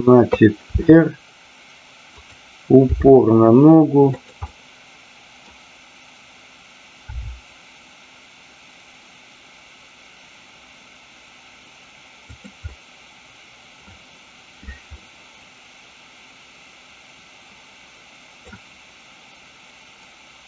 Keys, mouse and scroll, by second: 0.6 r, 2.2 click, 2.9 g, 4.2 click, 4.4-5.4 middle drag, 7.0 r, 12.3 drag, 12.5-13.6 middle drag, 14.9-18.4 middle drag.